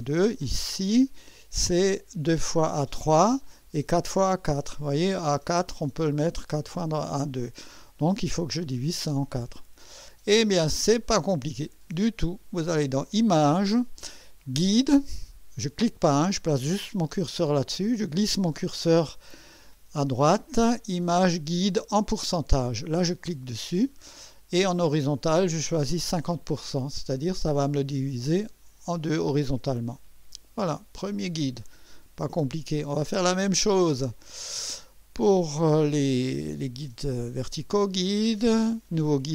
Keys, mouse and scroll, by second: 8.2 click, 12.7 click, 23.3 click, 29.8 click, 34.2 click.